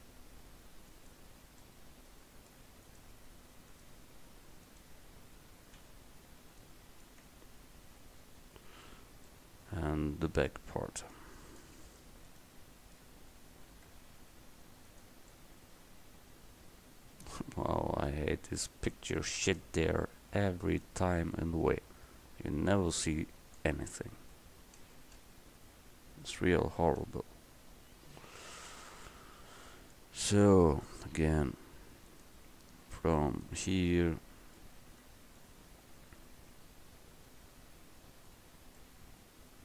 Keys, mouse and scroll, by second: 5.9 f, 7.3 Tab, 11.2 click, 12.1-12.5 middle drag, 14.0 Tab, 19.3 middle click, 21.6 Tab, 23.1 click, 25.3 KP_0, 27.1 KP_Decimal, 31.2 Tab, 32.2 right click, 34.0 right click.